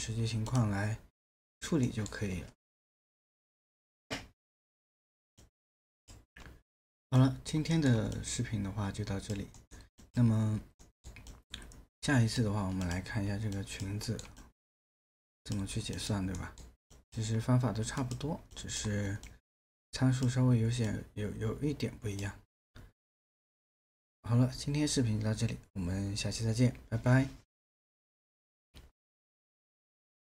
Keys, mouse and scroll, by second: 1.8 alt+middle click, 7.7 alt+middle click, 9.6 alt+middle click, 10.8 alt+middle click, 14.0 alt+middle click, 16.4 alt+middle click.